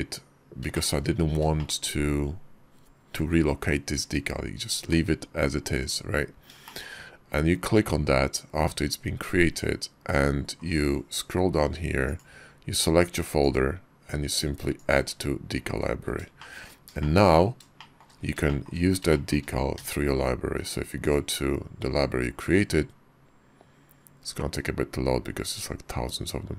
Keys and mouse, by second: 0.8 shift+middle click, 1.6 shift+middle click, 6.7 shift+middle click, 12.0-13.6 drag, 14.7 click, 16.4 shift+middle click, 17.0 shift+middle click, 17.8 shift+click, 18.5 shift+click, 19.1 shift+click.